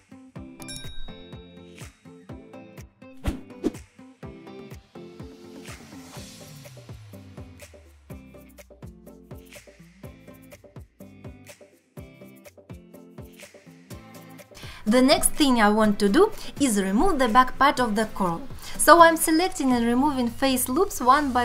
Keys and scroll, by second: 0.2 x, 0.8 ctrl+z, 2.7 x, 5.2 alt+z, 6.4 alt+z, 8.9 3, 11.3 2, 14.8 alt+q, 15.1 alt+q, 16.0 3, 19.4 alt+q, 19.8 x.